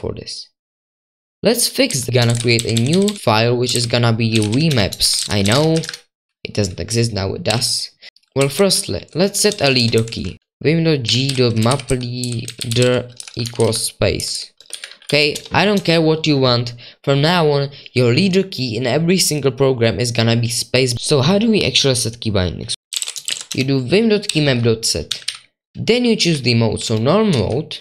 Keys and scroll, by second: 2.9-6.0 typing, 7.2-15.6 typing, 15.7 Right, 22.6-27.8 typing.